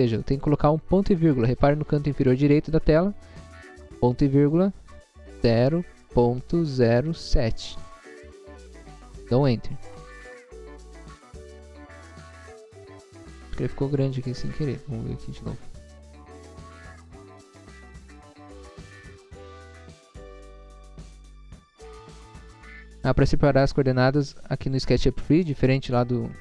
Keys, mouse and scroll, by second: 2.8 ,, 5.4 0, 6.2 ., 6.8 0, 7.6 7, 9.1 Return, 12.0-12.4 scroll up 1, 12.7 middle click, 13.4 middle click, 15.3 scroll up 1, 18.3 Left, 19.2 click.